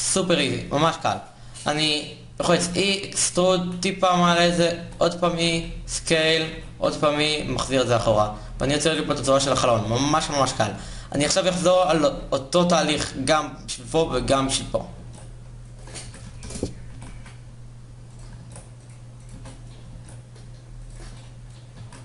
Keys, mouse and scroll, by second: 2.2 e, 4.5 e, 5.2 s, 6.2 e, 7.4 Tab, 9.2 Tab, 10.0 a, 14.7 ctrl+r, 15.7 s, 16.6 g, 18.9 ctrl+r, 19.0 a, 19.6 ctrl+r, 21.4 s.